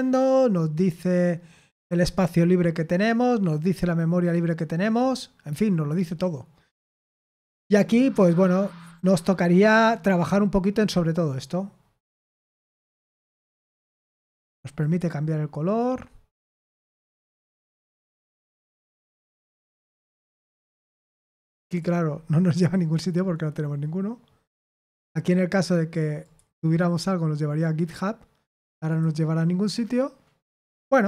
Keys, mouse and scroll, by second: 13.1 click, 14.7 click, 17.2 click, 18.4 click, 18.7 drag, 19.6 click, 21.6 click, 26.2 click, 26.6 click, 28.8 click, 30.5 click.